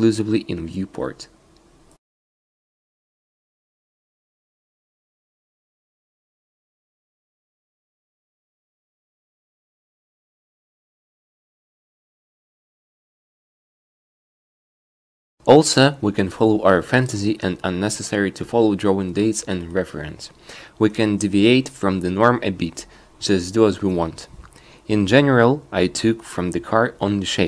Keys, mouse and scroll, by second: 13.4 a, 21.5-22.8 drag, 23.3 click, 24.7 click, 24.9 shift+e, 25.9 click, 26.3 shift+e.